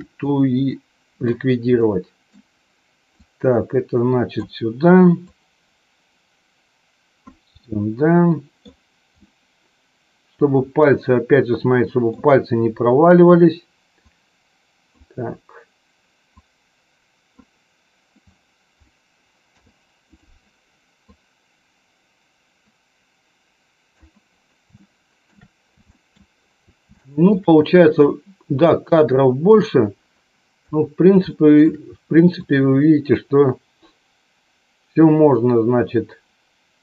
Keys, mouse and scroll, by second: 0.6 middle click, 1.7 middle click, 3.2-4.4 drag, 5.3-7.4 drag, 8.6 middle click, 9.1-12.1 scroll up 1, 12.1-14.1 middle drag, 14.1-15.1 drag, 16.3-17.6 drag, 19.5 i, 21.2-24.2 drag, 24.7 shift+middle click, 26.0 shift+middle click, 27.0 shift+middle click, 28.2-29.7 drag, 31.3 shift+middle click, 32.6-36.8 drag.